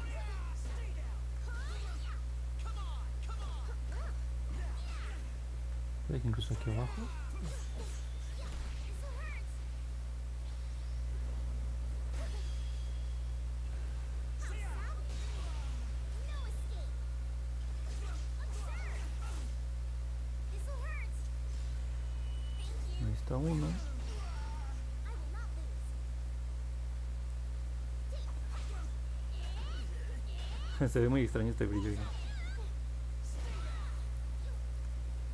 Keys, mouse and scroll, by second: 0.7 click, 1.1 ctrl+z, 2.2 click, 3.6 ctrl+z, 7.3 click, 9.1 ctrl+z, 9.8 click, 11.9 ctrl+z, 14.5-15.8 drag, 16.7 ctrl+z, 17.6 click, 18.2 ctrl+z, 20.8 click, 26.9-28.1 drag, 29.1 ctrl+z, 30.6-33.4 drag, 34.6 ctrl+z.